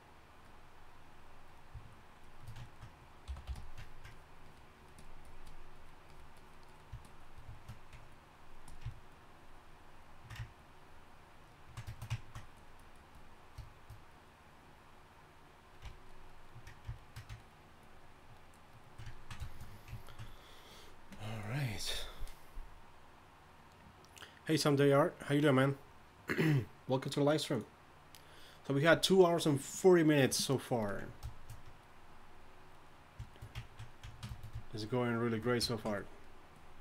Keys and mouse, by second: 3.9 f, 7.5-12.0 drag.